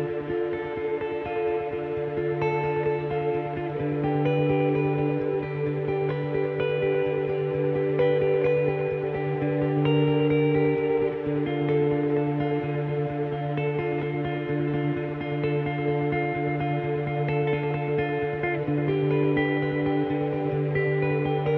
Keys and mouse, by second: 0.3 click, 1.1 click, 1.3 middle click, 1.6 click, 1.6-6.9 typing, 1.9 click, 2.4 click, 2.7 Escape, 2.9 ctrl+z, 3.2 click, 3.4 right click, 3.6 click, 4.3 click, 7.6 middle click, 7.9 click, 8.8 click, 8.9 right click, 9.2 middle click, 9.6 click, 10.1 click, 10.3 middle click, 10.8 ctrl+r, 11.2 click, 11.6-18.4 typing, 11.7 click, 12.4 click, 13.2 click, 13.6 click, 13.9-15.0 drag, 14.0 right click, 14.5 right click, 15.1 click, 16.1 click, 16.5 click, 16.8 click, 17.2 click, 17.4 right click, 18.2 click, 18.5 click, 18.8 ctrl+r, 19.1 click, 19.1 right click, 19.3 right click, 19.7 click, 19.7 right click, 19.9 g, 19.9 right click, 20.0 right click, 20.1 g, 20.7 ctrl+r, 21.3 click.